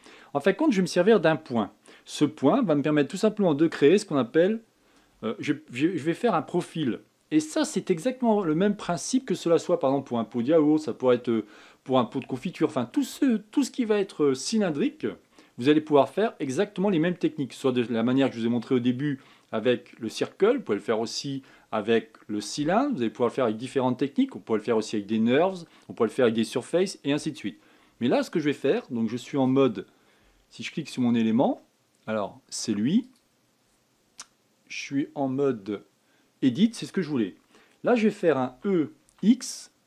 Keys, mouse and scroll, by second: 31.8 Tab, 33.7 click, 36.0 Tab, 39.2 e.